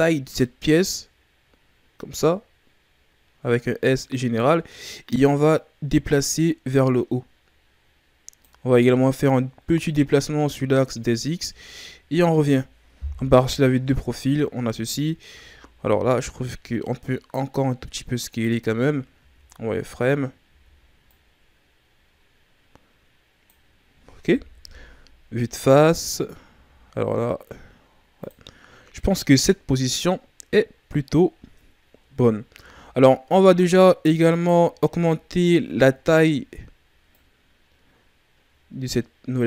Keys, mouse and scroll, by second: 5.3 click, 9.3 click, 11.4 z, 12.0-12.4 scroll down 4, 12.4 Tab, 13.2 KP_3, 14.5-14.8 scroll up 3, 15.3 Tab, 15.8 s, 19.2 z, 20.5 z, 21.0 click, 24.6 KP_1, 26.5 s, 29.0-30.5 ctrl+scroll down 1, 30.5-31.9 scroll down 9, 31.9-32.6 scroll up 11, 32.6 z, 33.3-34.3 shift+scroll down 4, 34.3-35.8 alt+right drag, 35.8-37.1 shift+scroll down 4, 37.1 click.